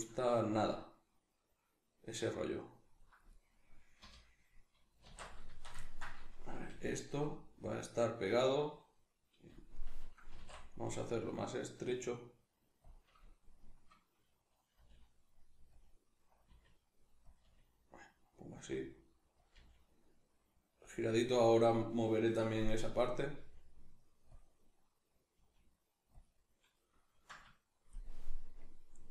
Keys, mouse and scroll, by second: 3.3 right click, 3.9 l, 5.0 alt+q, 5.5-6.6 shift+middle drag, 6.6 g, 7.7-10.3 drag, 10.3 s, 12.9-14.8 drag, 14.8 g, 15.8 click, 16.5 r, 17.4 click, 17.4 g, 18.6 click, 18.7 r, 19.5 click, 19.6 g, 21.0 click, 23.4 g, 24.4 click, 25.4 g, 26.2 click, 26.8-29.1 middle drag.